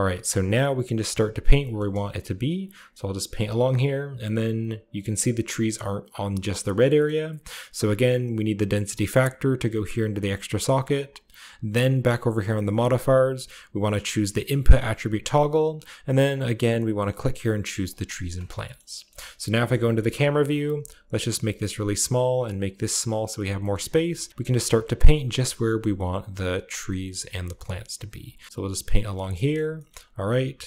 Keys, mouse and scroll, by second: 0.1-1.4 shift+middle drag, 1.7 shift+middle click, 2.3-4.8 shift+drag, 6.3-8.8 scroll down 2, 6.8 middle click, 7.0-8.8 middle drag, 10.1 click, 10.4 click, 11.0-11.5 drag, 12.5 click, 14.6-16.2 drag, 16.3-17.4 drag, 17.8 click, 18.2 shift+click, 18.5-20.3 shift+middle drag, 18.7-20.3 shift+scroll down 1, 19.5 shift+KP_0, 20.3 scroll down 1, 21.0 click, 21.6-22.7 drag, 23.3 shift+click, 23.5 shift+middle click, 23.8-25.8 shift+scroll up 1, 24.4 shift+middle click, 24.8 shift+middle click, 24.9 middle click, 25.8-27.9 shift+scroll down 2, 26.0-28.0 drag, 28.0 middle click, 28.1 click, 28.2 middle click, 28.4 click, 29.3 middle click, 29.4 click, 29.5-30.6 shift+middle drag, 29.6-30.6 shift+scroll down 3.